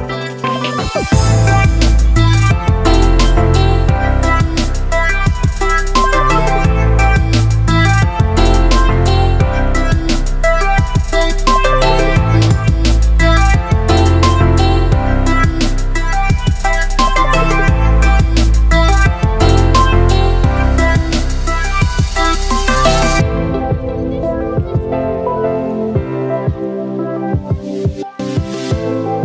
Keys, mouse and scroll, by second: 4.5 space, 4.9-10.6 ctrl+drag, 10.6-16.7 alt+drag, 16.7-19.1 alt+drag, 24.4 click, 24.4 click, 24.4 a.